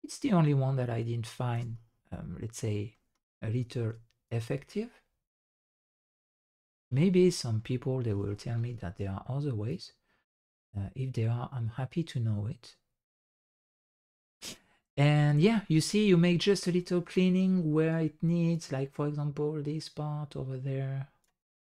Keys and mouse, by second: 2.7 shift+drag, 5.9 ctrl+click, 7.3 middle drag, 8.3 shift+drag, 9.6 ctrl+click, 14.4 middle drag, 14.9 shift+click, 15.2 drag, 15.9 click, 16.7 shift+drag, 18.5 ctrl+click.